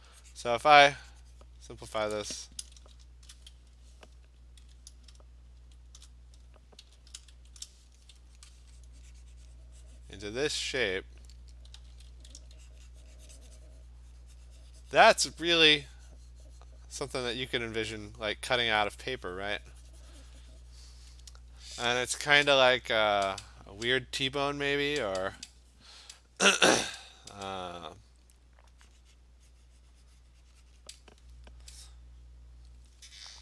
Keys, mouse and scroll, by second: 1.6 click, 1.6 ], 2.8 ctrl+shift+n, 3.7 Escape, 4.7 v, 5.6 alt+shift+n, 6.8 b, 7.4 alt+shift+n, 8.5 click, 10.5 click, 11.8 [, 12.0 [, 12.1 [, 12.4 [, 21.1 click, 26.1 click, 31.0-33.4 drag.